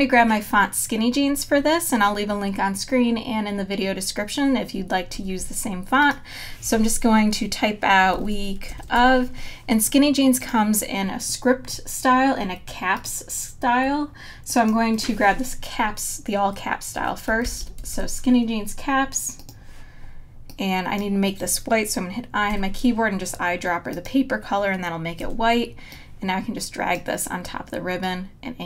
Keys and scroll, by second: 7.8-9.5 typing, 17.1-18.3 typing, 22.5 i, 25.2 v.